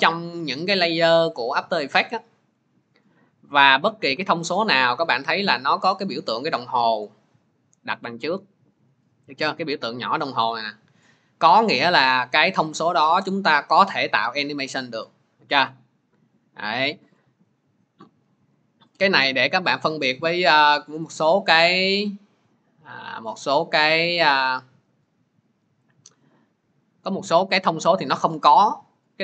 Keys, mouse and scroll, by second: 20.5 click, 21.4 click, 23.1 click, 24.3 click, 27.4 middle click.